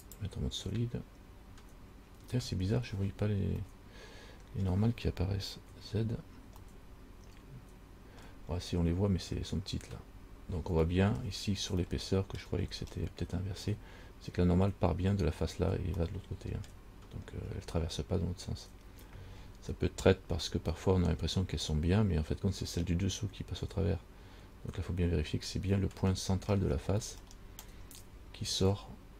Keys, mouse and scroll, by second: 0.3 click, 1.8 scroll up 3, 3.8 middle click, 5.9 z, 6.9 middle click, 8.8 scroll up 2, 11.1 middle click, 12.1 shift+middle click, 12.8-14.2 scroll up 3, 16.2 middle click, 17.5 scroll down 2, 19.7 scroll down 2, 26.0-27.4 scroll up 4, 27.5 shift+middle click, 28.1-28.5 scroll up 3.